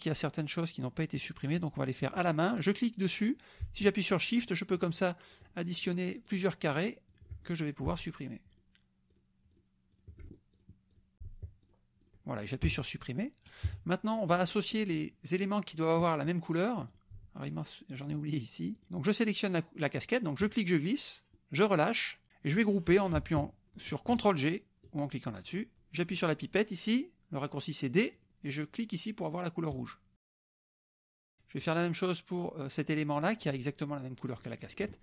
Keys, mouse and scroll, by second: 1.3 click, 2.1 click, 2.5 click, 3.9 shift+click, 5.0 shift+click, 5.3 shift+click, 5.7 shift+click, 6.4 shift+click, 6.8 shift+click, 7.1 shift+click, 7.5 shift+middle click, 8.5 shift+click, 8.7 shift+middle click, 9.2 shift+click, 9.5 shift+click, 9.7 shift+middle click, 10.1 shift+click, 10.2 shift+click, 10.4 shift+middle click, 10.7 shift+click, 11.0 shift+click, 11.1 shift+middle click, 11.8 shift+click, 12.8 Delete, 13.7 KP_Subtract, 14.3 click, 14.9-16.1 middle drag, 17.0 click, 17.5 shift+click, 18.1 shift+click, 18.7 shift+click, 20.5-21.5 drag, 25.1 ctrl+click, 28.1 click, 29.7 click, 30.9 click, 31.3 middle click, 33.1 click, 34.4 middle click.